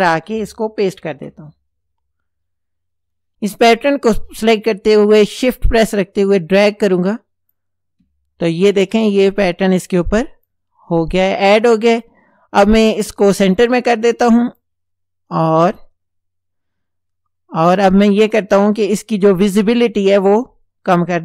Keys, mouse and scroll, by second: 1.1 ctrl+v, 5.0-7.7 shift+drag, 9.0-10.7 drag, 11.4 click, 14.5 click, 15.7 click, 18.2 click, 19.8-21.2 drag.